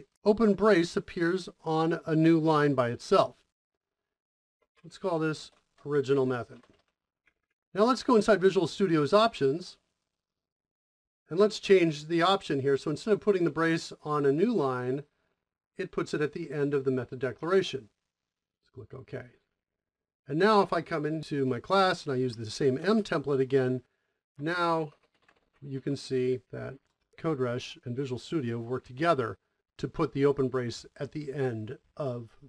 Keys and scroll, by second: 4.2-6.9 typing, 7.0 Return, 7.3 Return, 10.5 typing, 21.2 Return, 21.5 m, 22.7 m, 22.7 space, 24.4-26.2 typing, 26.4 Return.